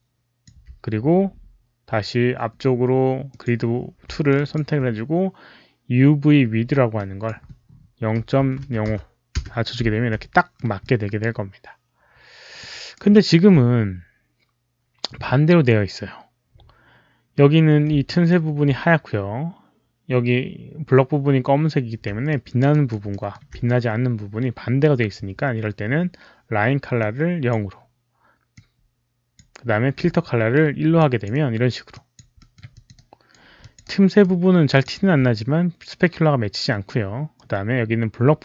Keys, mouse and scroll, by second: 3.2 alt+click, 4.2 alt+click, 6.8 Return, 6.8 alt+click, 6.8 alt+right click, 6.8 alt+middle click, 8.3 alt+click, 8.3 alt+right click, 8.3-8.8 typing, 8.8 alt+click, 10.2 alt+middle click, 11.2-12.8 alt+drag, 12.6 alt+right click, 13.0 middle drag, 18.0 alt+middle click, 19.7 Return, 19.7 alt+middle click, 19.7 alt+right click, 19.7 alt+click, 20.3 alt+middle click, 20.3 alt+right click, 20.3 alt+click, 21.2 alt+middle click, 21.2 alt+right click, 21.2 alt+click, 22.2 alt+click, 22.7 alt+right click, 23.0 alt+middle click, 23.5 alt+click, 26.9-27.4 alt+drag, 26.9 alt+middle click, 26.9 alt+right click, 28.4-29.2 alt+drag, 28.5 alt+middle click, 28.5 alt+right click, 28.6 alt+middle click, 28.6 alt+right click, 30.9 alt+click, 31.3 alt+right click, 31.8 alt+click, 32.3 alt+middle click, 32.6 alt+click, 32.8 alt+right click, 33.5 alt+click, 33.7 alt+right click, 34.6 alt+click.